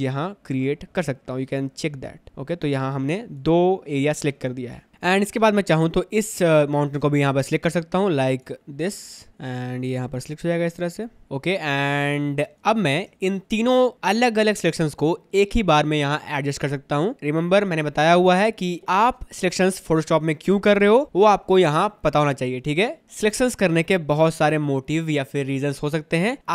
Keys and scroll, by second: 4.9 space, 5.5 space, 12.1 space.